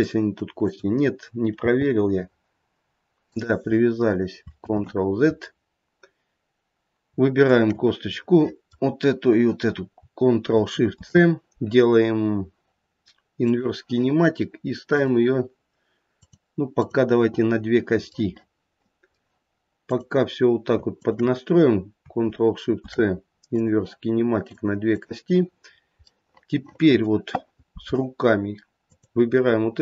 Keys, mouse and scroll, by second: 0.6 click, 1.6 g, 4.7 ctrl+z, 5.7-7.1 scroll up 1, 7.4 shift+click, 8.2 middle click, 14.9 click, 16.2 click, 16.7 click, 18.3 middle click, 18.7 middle click, 19.9 click, 21.0 shift+click, 22.7 ctrl+shift+c, 24.5 click, 24.9 click, 25.7-26.1 scroll down 1, 26.1 middle click, 26.8 middle click, 28.9 click.